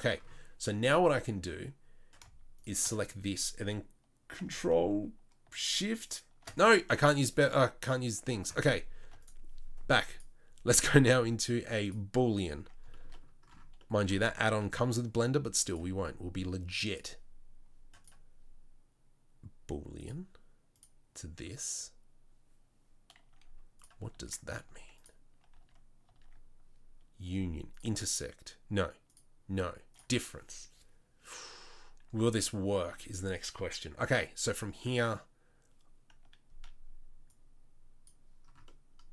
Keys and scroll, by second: 24.1 Tab, 24.6 Tab, 25.5 Tab, 26.1 Tab.